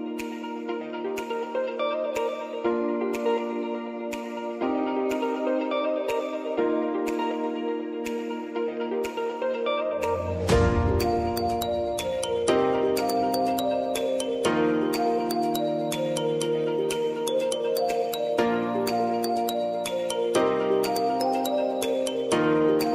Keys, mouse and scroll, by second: 3.1-5.3 drag, 11.8 click, 11.9 click, 12.1 ctrl+a, 13.3-14.2 typing, 16.2-19.0 drag, 19.2 click, 20.0 g, 22.0 click.